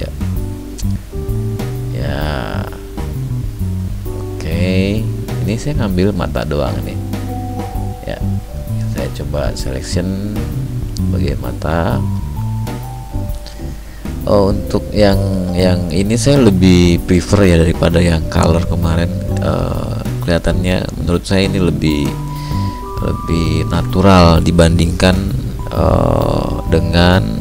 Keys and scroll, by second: 5.9 ctrl+d, 17.5 ctrl+shift+i, 23.4 ctrl+d, 24.4 ctrl+m.